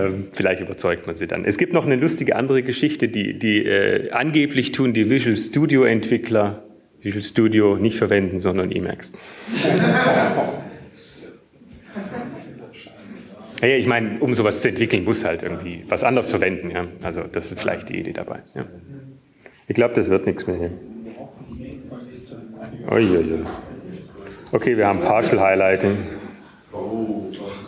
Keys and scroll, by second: 24.7 ctrl+g, 26.2 ctrl+g, 27.3 Up.